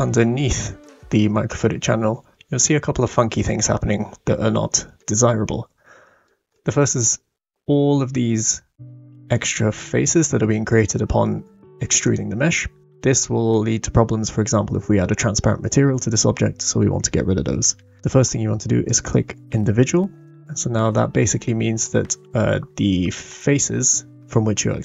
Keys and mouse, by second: 0.8-1.5 middle drag, 2.6-3.1 shift+middle drag, 4.9-6.2 middle drag, 6.5-7.0 middle drag, 12.0 click, 17.6 middle click, 18.8 click, 20.9-21.8 middle drag.